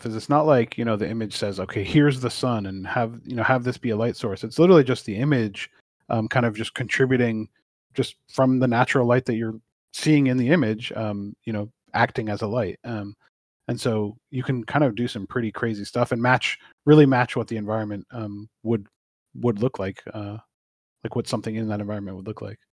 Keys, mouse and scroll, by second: 0.1 click, 17.5 middle click.